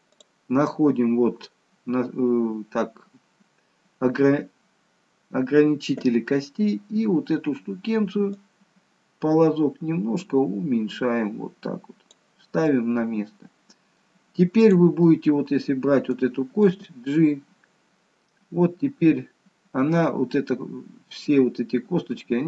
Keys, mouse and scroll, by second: 0.2 click, 8.5 click, 12.8 middle click, 14.9 click, 15.1 middle click, 16.7 g.